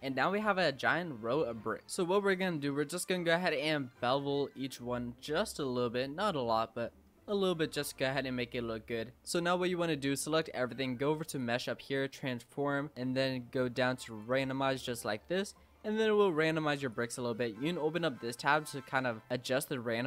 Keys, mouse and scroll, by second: 0.0 middle click, 0.4-0.8 scroll down 4, 1.0 middle click, 1.9-2.3 scroll up 4, 2.3 ctrl+b, 5.6 Tab, 5.9-7.6 middle drag, 7.6 Tab, 11.4-14.1 drag, 15.0-16.9 middle drag, 16.9-20.0 drag.